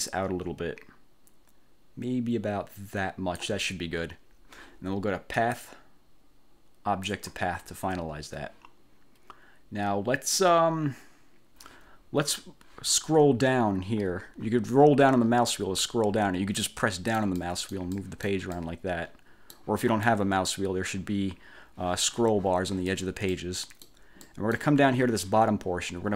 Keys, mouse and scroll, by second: 5.5 click, 7.2 click, 13.6 scroll down 1, 14.1-16.0 scroll down 7, 16.7 click, 17.6 click, 18.8-19.8 drag, 20.0 click, 23.4 click, 24.3 click.